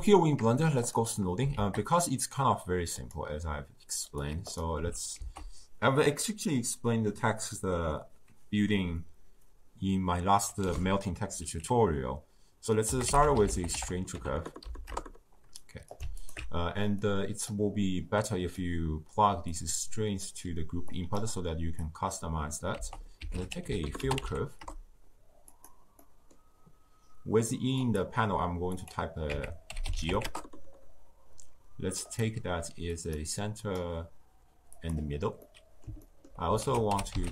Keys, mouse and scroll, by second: 0.8 click, 3.0 shift+a, 4.1-20.2 drag, 25.5 l, 26.6-30.2 middle drag, 30.2-35.4 drag, 35.4-37.3 middle drag.